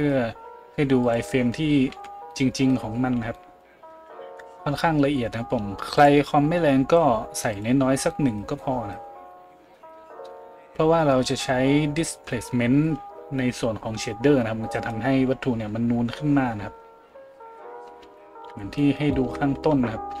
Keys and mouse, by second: 1.1-6.0 middle drag, 2.7 z, 6.0-20.2 drag, 18.0-18.4 shift+middle drag, 18.9-19.3 shift+middle drag, 19.7 z.